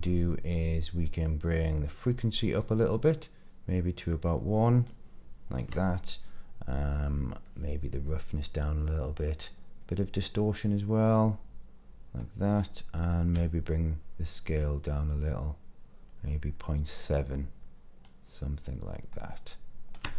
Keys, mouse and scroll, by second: 0.0 middle click, 2.5-5.6 shift+drag, 7.0 middle click, 7.9-9.1 drag, 10.2-12.5 drag, 13.3-19.9 shift+drag.